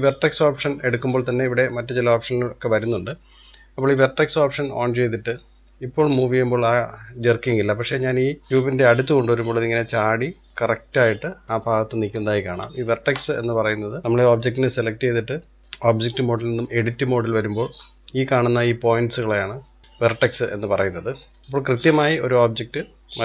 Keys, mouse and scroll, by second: 5.0-6.1 middle drag, 6.1 click, 11.8-12.4 middle drag, 12.4-12.9 scroll up 2, 12.9-13.5 shift+middle drag, 13.5 click, 15.6-17.3 drag, 17.3-18.4 scroll up 2, 18.4 click, 19.0-19.8 scroll down 1, 19.8 click, 21.3 click, 21.5-21.9 scroll down 1, 21.9-22.4 middle drag, 22.4 click.